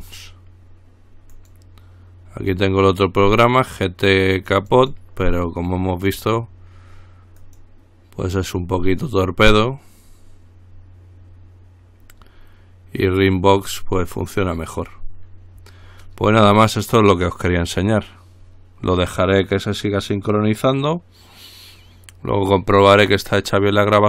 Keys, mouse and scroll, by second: 1.5 click, 2.7 click, 4.5 click, 7.6 click, 8.6 click, 13.6 click.